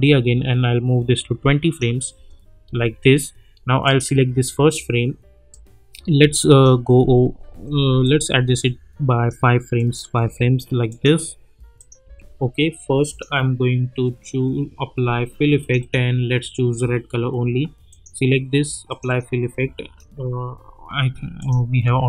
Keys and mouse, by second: 2.1 space, 3.8-6.7 drag, 7.5 =, 8.0-9.6 drag, 10.2 [, 10.9 click, 12.1 [, 13.0 click, 15.6 click, 21.4 click.